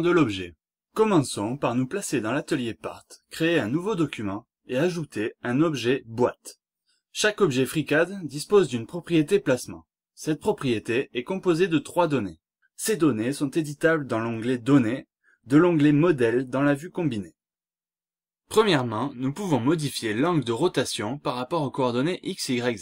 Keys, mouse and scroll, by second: 0.2 click, 1.7 click, 4.4 click, 5.9 click, 7.8 click, 9.7 click, 11.3 click, 13.6 click, 14.7 click, 15.7 click, 17.0-17.8 scroll down 2, 18.8 click, 22.2-22.8 scroll up 1.